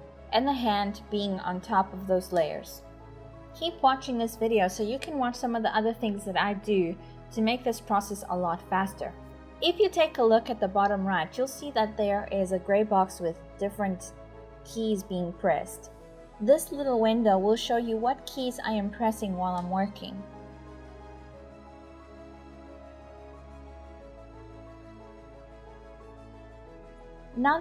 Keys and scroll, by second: 3.2-3.9 typing, 20.6 typing, 22.8-27.6 typing.